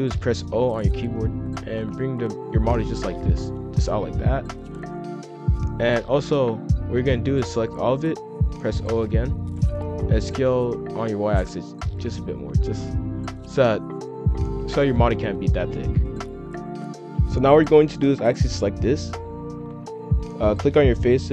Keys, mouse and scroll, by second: 0.4 o, 0.9 scroll up 2, 1.8 g, 4.7 middle click, 5.2 a, 8.9 o, 10.1 s, 12.2 scroll up 1, 12.3 middle click, 12.7-13.8 scroll down 2, 13.8-16.6 middle drag, 16.6 F2, 18.6-20.0 drag, 21.1 shift+click.